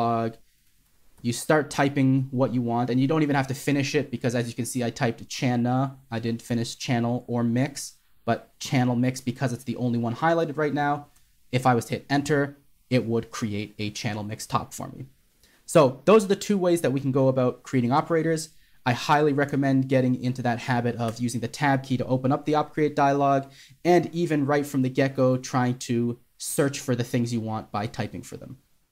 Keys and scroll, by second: 11.5 Return, 19.8 BackSpace, 21.4 Tab, 25.2-26.2 typing.